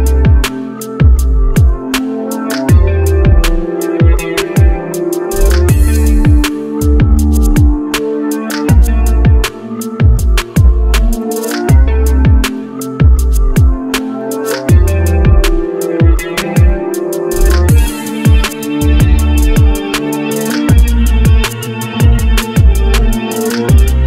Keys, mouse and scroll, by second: 1.4 F4, 4.4 right click, 9.8 ctrl+z, 11.4 scroll up 1, 15.9 right click, 17.1 scroll down 1, 23.8 right click.